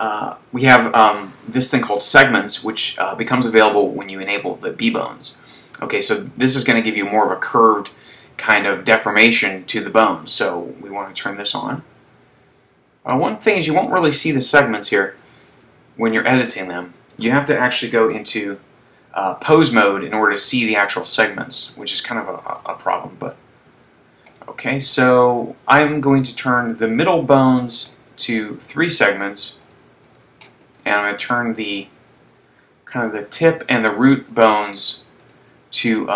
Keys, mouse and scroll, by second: 0.5 scroll down 1, 11.7 click, 13.4 right click, 15.2 click, 15.5 click, 18.4 ctrl+Tab, 21.2-22.6 scroll up 1, 22.6 ctrl+Tab, 23.8 Tab, 24.3 right click, 26.2 click, 26.8 click, 28.3 right click, 29.9 click, 31.7 click, 31.7 right click, 33.3 click, 35.8 click.